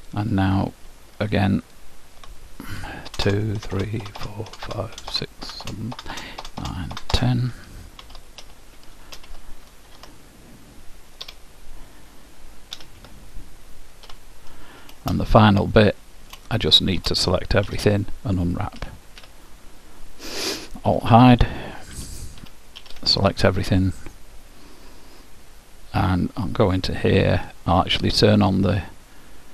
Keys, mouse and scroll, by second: 0.1-3.6 drag, 8.1 shift+', 9.9 ctrl+Tab, 12.9 u, 13.1 u, 14.1 h, 15.3-18.4 middle drag, 17.9 a, 18.9 u, 21.0 alt+h, 22.0 a, 22.8 a, 28.5-29.5 drag.